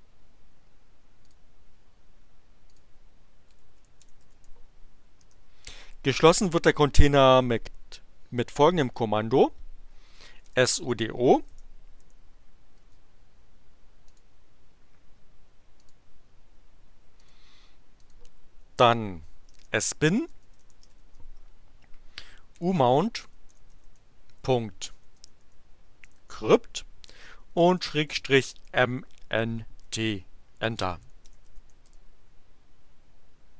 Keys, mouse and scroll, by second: 1.2 click, 2.7 click, 3.2-4.8 typing, 5.2 Return, 10.0-12.0 typing, 13.2 space, 14.1 click, 15.7 click, 17.1 click, 18.0 click, 19.3-29.0 typing, 29.8 Return, 30.5-32.0 typing.